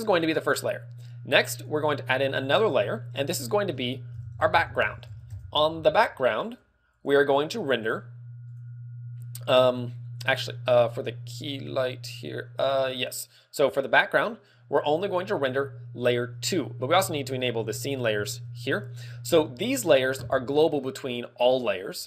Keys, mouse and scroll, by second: 1.5 click, 1.8 click, 3.5 click, 8.5 click, 15.5 click, 17.3 shift+click.